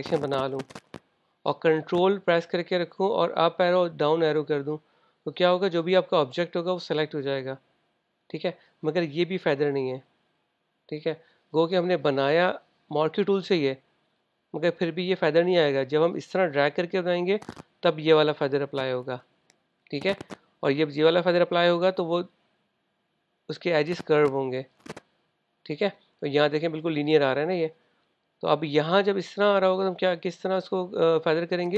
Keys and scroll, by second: 4.2 super+Page_Up, 4.4 super+Page_Down.